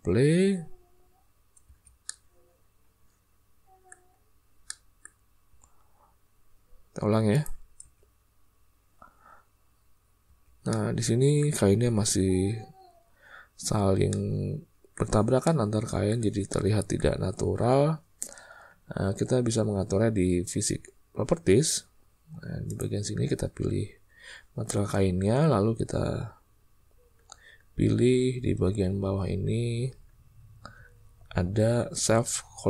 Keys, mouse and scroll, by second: 1.7 space, 2.0 drag, 2.1-3.9 middle drag, 4.6 middle click, 5.4 space, 7.0 space, 7.7 space, 10.2 space, 10.7 click, 10.8-11.4 middle drag, 14.0-14.9 middle drag, 15.4-16.1 middle drag, 16.4-17.0 shift+middle drag, 22.6 click.